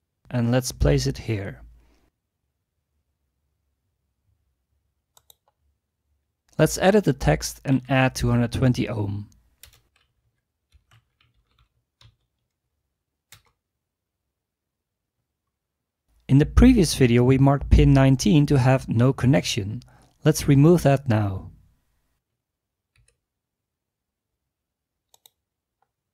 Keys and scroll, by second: 1.5 typing, 7.5-8.2 typing, 9.9-12.6 typing, 23.0 Delete.